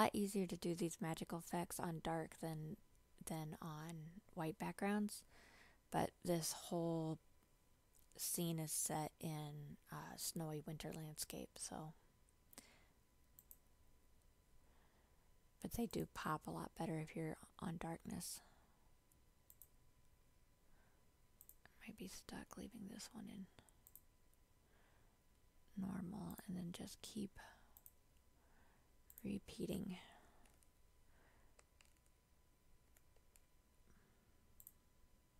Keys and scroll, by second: 31.7 ctrl+j.